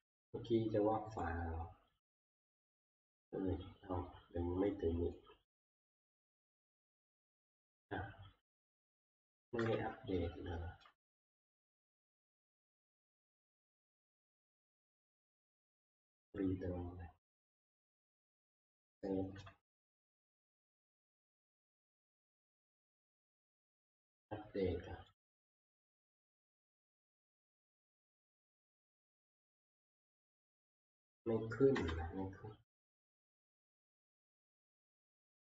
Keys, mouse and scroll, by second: 1.5 click, 2.4 click, 3.1 click, 3.9 click, 4.1 click, 4.4 click, 5.5 click, 5.5 scroll, 5.7 click, 6.5-6.9 scroll, 7.6 click, 9.4 click, 9.7 alt+Tab, 10.9 alt+Tab, 11.1 alt+Tab, 12.8 click, 13.2 right click, 16.4 click, 18.0 click, 18.7 ctrl+s, 19.4 alt+Tab, 20.4 alt+Tab, 20.6 alt+Tab, 23.1 right click, 25.2 click, 30.2 click, 31.0 scroll, 31.7 Delete, 33.4-34.0 scroll, 34.4 t.